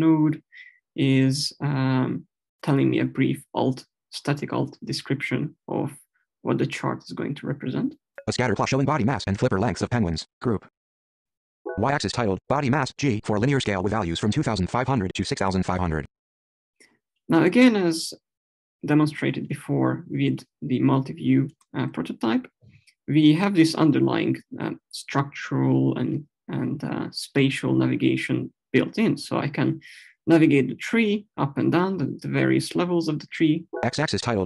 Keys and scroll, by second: 11.4 Down, 33.4 Right.